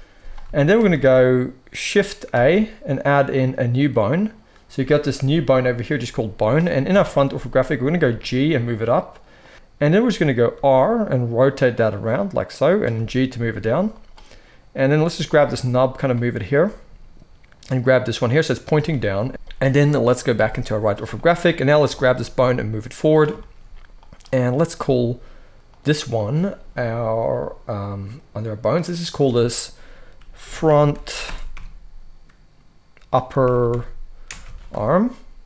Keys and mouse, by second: 0.8 alt+a, 2.2 shift+a, 6.8 KP_1, 8.0 g, 9.5-14.7 middle drag, 9.5 r, 10.5 r, 12.9 g, 14.7 click, 14.8-16.5 middle drag, 15.1 g, 16.5 click, 16.6-24.0 middle drag, 16.6 g, 20.3 KP_3, 22.3 g, 24.0 click, 24.7-25.8 middle drag, 24.7 g, 25.8 click, 26.0-28.9 middle drag, 28.9-35.4 drag, 33.3 p.